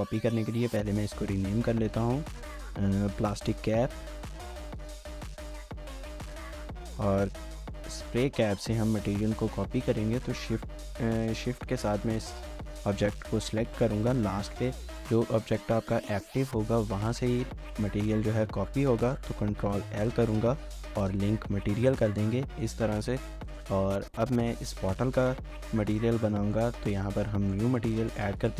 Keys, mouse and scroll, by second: 1.4 double click, 3.4-6.6 typing, 7.8 ctrl+click, 14.3 shift+middle click, 17.4 shift+middle click, 19.6 ctrl+l, 20.6 Down, 20.8 Down, 21.1 Return, 22.6 shift+middle click, 23.1 shift+scroll down 1, 24.1 shift+middle click, 24.7 shift+middle click.